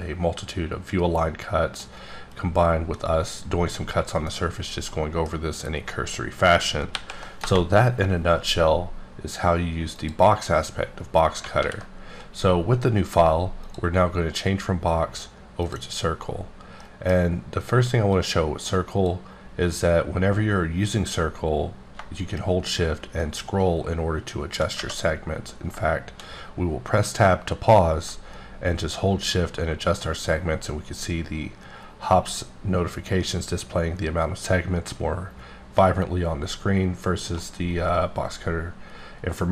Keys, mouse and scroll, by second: 3.7 middle click, 4.9 middle click, 6.8 ctrl+n, 7.4 Return, 9.9 click, 11.5 alt+w, 14.9 click, 15.6 click, 16.8 middle click, 17.2-17.6 scroll up 1, 18.0 click, 22.0 shift+Num_Lock, 22.0 shift+click, 22.2-22.7 shift+scroll down 6, 22.7 shift+scroll, 22.9-23.2 shift+scroll up 10, 23.2 shift+scroll, 23.5 shift+scroll down 3, 23.8-24.2 shift+scroll up 10, 24.7 shift+scroll down 2, 24.8 Tab, 28.3-28.8 shift+scroll down 7, 28.8-29.4 shift+scroll up 8, 29.4-30.3 shift+scroll down 18, 30.9 scroll down 5, 31.0 scroll, 31.3-32.2 scroll up 5, 33.0-33.3 shift+scroll up 3, 33.4 shift+scroll down 1, 34.7 shift+scroll up 2, 36.2 shift+scroll up 2, 36.8 shift+scroll up 1, 37.3 shift+scroll down 2, 38.7-39.1 scroll down 3, 39.1-39.5 scroll up 3.